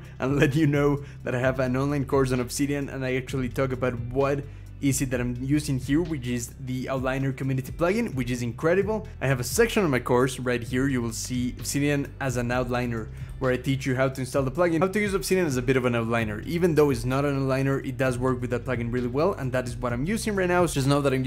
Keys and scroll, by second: 10.3-11.2 scroll down 4, 11.3 scroll down 1.